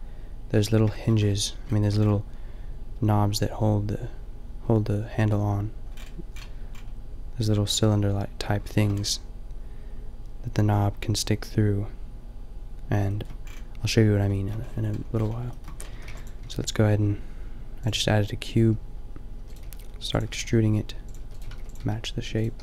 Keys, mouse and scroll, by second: 0.5 middle click, 1.0 middle click, 1.7 middle click, 4.9 middle click, 5.9-9.0 middle drag, 15.9 a, 16.0 b, 16.4 g, 19.3-22.6 typing.